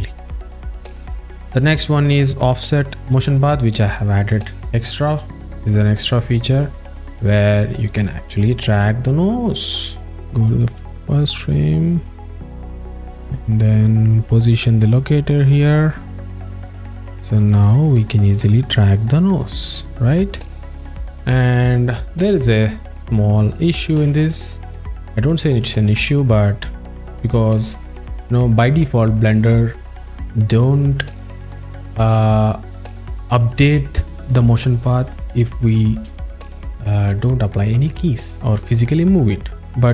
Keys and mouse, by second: 4.7 alt+shift+middle click, 5.9-7.0 alt+middle drag, 7.4 alt+shift+middle click, 8.5 click, 10.1 click, 15.7 alt+middle click, 17.7 ctrl+middle click, 19.1 click, 20.7 shift+middle click, 21.1 ctrl+middle click, 21.7 alt+shift+click, 24.7 click.